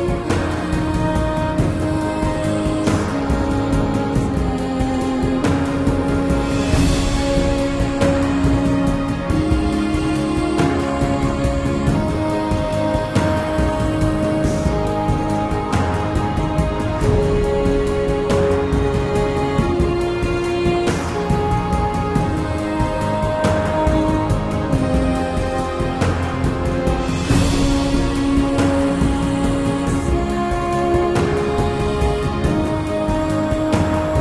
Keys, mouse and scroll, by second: 7.9 super+z, 21.0 super+z, 32.9 super+z.